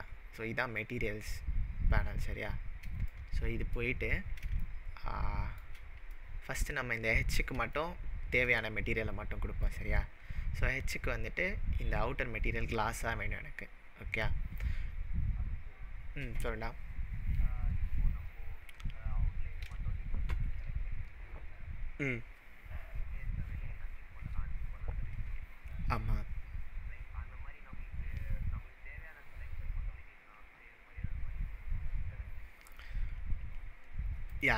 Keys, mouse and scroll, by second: 3.2-4.0 middle drag, 6.8-7.7 scroll up 6, 7.7-8.3 shift+middle drag, 9.6 click, 34.3 click.